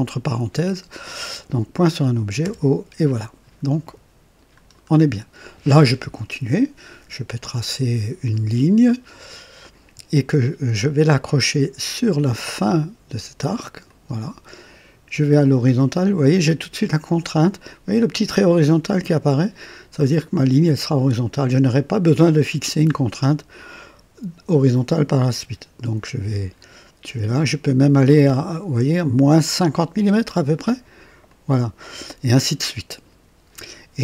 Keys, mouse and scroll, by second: 2.4 o, 4.5-4.9 scroll down 2, 9.6 click, 13.8 click, 31.3 click.